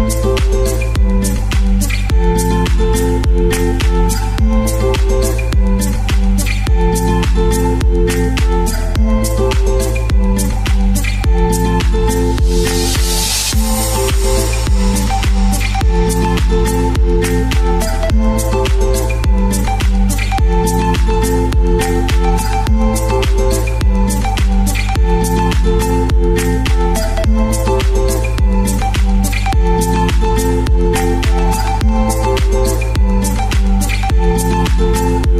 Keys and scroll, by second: 4.0 super+x, 10.6 shift+Right, 17.3 super+v, 26.8 Page_Up, 27.0 Page_Up, 32.1 shift+Page_Down.